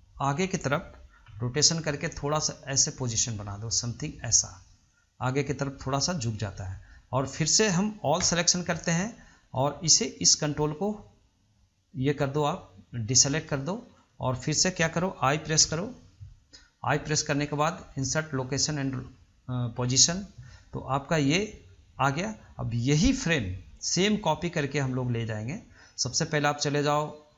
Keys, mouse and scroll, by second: 0.3-1.5 drag, 1.5 r, 9.8-11.5 middle drag, 11.5 ctrl+drag, 12.7-13.5 middle drag, 13.5-13.8 scroll down 1, 13.8-15.8 shift+middle drag, 15.8 i, 24.0 click, 26.3-27.3 drag.